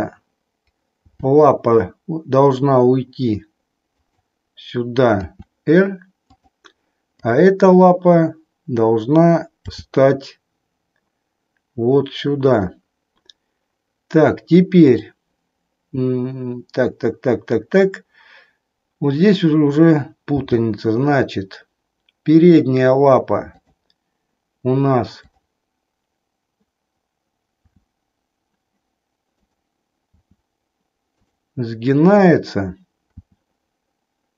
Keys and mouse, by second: 1.0 g, 4.1 click, 5.0 r, 6.4 click, 7.1-8.1 drag, 9.7 g, 14.9 click, 20.4 g, 23.6 click, 27.6 r, 30.3 r, 32.1-33.3 drag, 33.4 r.